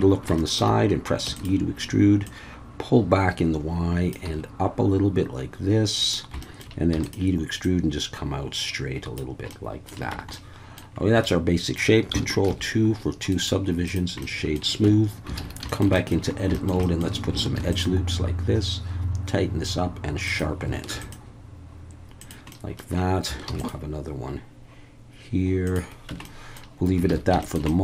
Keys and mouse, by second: 0.4 shift+middle click, 1.2 e, 1.3 click, 2.3-4.1 drag, 4.2 s, 6.0 click, 6.4 shift+middle click, 6.9 e, 7.0 click, 7.7-9.2 drag, 9.5 middle click, 10.1 Tab, 10.3-10.8 middle drag, 11.2-11.7 middle drag, 12.5 ctrl+2, 13.3 right click, 14.2-14.5 middle drag, 14.8 Tab, 15.4 alt+a, 15.7 shift+middle click, 16.0 middle click, 16.5 shift+middle click, 16.8 middle click, 17.5 ctrl+r, 20.3 click, 20.9 ctrl+r, 22.2 click, 22.5 middle click, 23.5 ctrl+r, 25.6 click, 26.1 Tab, 26.2 middle drag, 27.1 alt+a, 27.4 shift+middle click, 27.7 middle click.